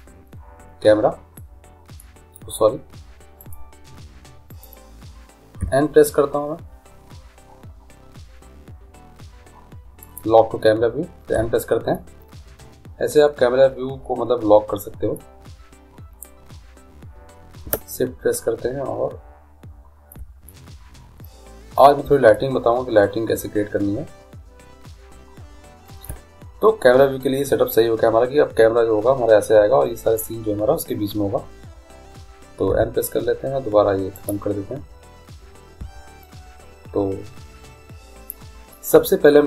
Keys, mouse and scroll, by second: 1.3-3.4 middle drag, 4.6 click, 5.6 n, 10.0-11.8 drag, 11.3 n, 20.6-24.7 middle drag, 32.7 n, 34.1-36.0 drag, 35.7 n.